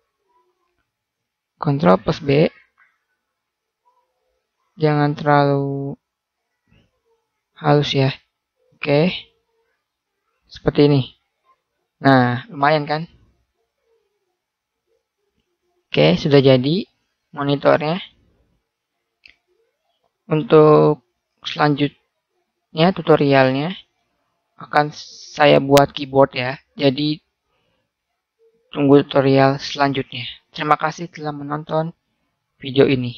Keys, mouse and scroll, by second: 0.6 ctrl+z, 2.0 ctrl+b, 9.0 a, 10.0 click.